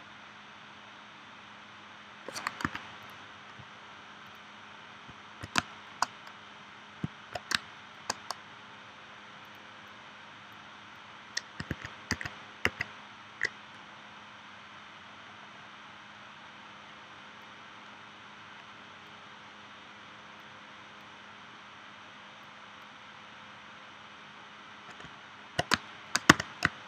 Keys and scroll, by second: 2.6 a, 5.6 space, 7.5 space, 11.7 super+z, 26.3 v.